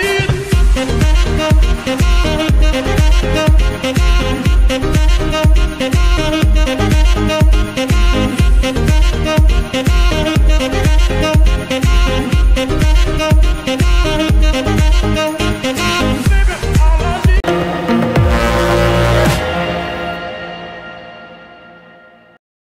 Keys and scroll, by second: 0.1 Escape, 0.7 g, 2.4 Escape, 3.0 g, 7.8 g, 7.9 y, 13.0 Escape, 16.7 ctrl+s.